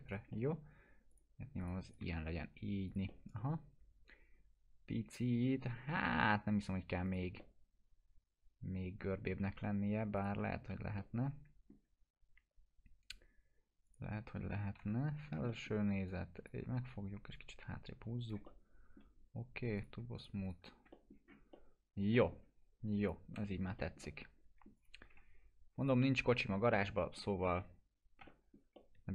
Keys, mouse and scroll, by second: 0.3 alt+middle click, 1.1 click, 2.2 F4, 2.6 scroll down 1, 2.9 click, 3.1-6.2 alt+middle drag, 7.1 click, 7.4-9.2 alt+middle drag, 10.2 click, 10.3 F4, 10.7 scroll up 1, 11.0-11.9 alt+middle drag, 13.8 click, 14.8 t, 15.2 scroll down 1, 15.5 middle click, 16.1-16.7 click, 16.6 w, 17.3-19.1 click, 18.4-19.8 alt+middle drag, 19.8 click, 20.8 F4, 20.9 middle click, 21.2-21.5 scroll down 1, 21.5-22.4 alt+middle click, 22.3 scroll down 1, 23.0 click, 23.4 p, 23.8-24.6 middle click, 24.7 click, 25.1 F4, 25.8 click, 26.0-27.3 alt+middle drag, 28.2 F4, 28.3-29.1 middle drag.